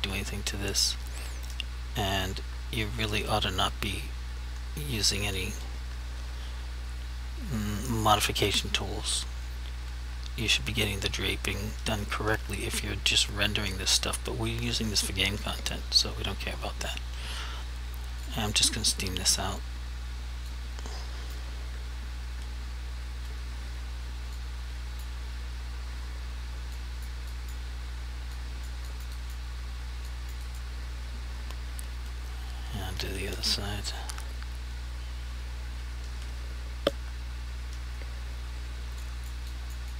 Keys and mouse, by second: 18.3 click, 20.6 click, 24.5 click, 26.9 click, 27.5 click, 28.5 click, 29.0 click, 29.3 double click, 30.2 click, 30.6 click, 39.2 click, 39.6 click.